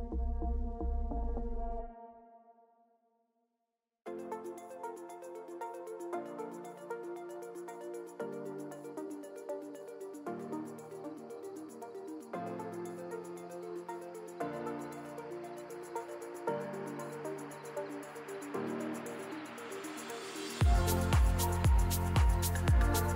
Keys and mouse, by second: 0.6 shift+click, 2.4 click, 3.6 click, 7.8 click, 13.0 click, 13.9-17.0 drag, 18.1-19.0 drag, 19.4-19.8 shift+drag, 21.8-23.1 drag.